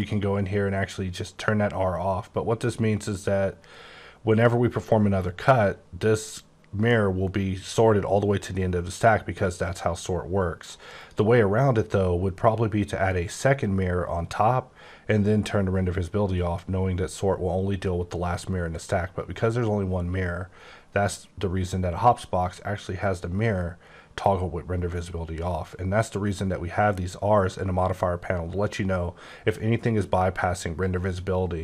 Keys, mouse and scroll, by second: 0.0 click, 10.9 click.